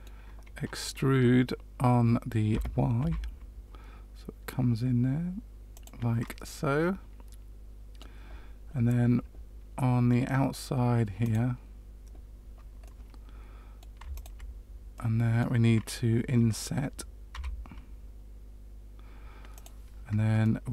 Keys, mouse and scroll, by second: 2.5 e, 6.2 middle click, 9.7 middle click, 11.2 click, 12.9 middle click, 14.1 shift+click, 14.9 middle click, 17.3 i, 20.4 middle click.